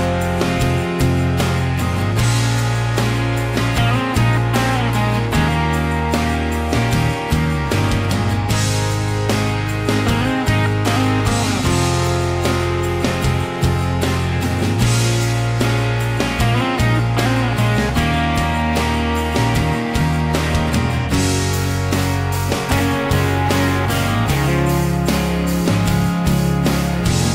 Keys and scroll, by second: 1.5 q, 2.9-4.3 typing, 11.9 e, 13.2 space, 14.1 p, 18.0 Escape, 19.1 m, 20.5-22.3 typing, 23.6-24.1 typing.